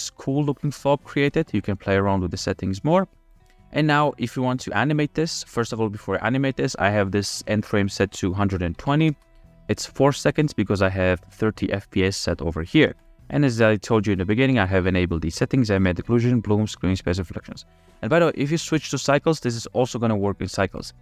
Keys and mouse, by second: 1.2 click, 8.1-9.5 drag, 11.2 click, 19.5 ctrl+s, 19.9-21.0 drag.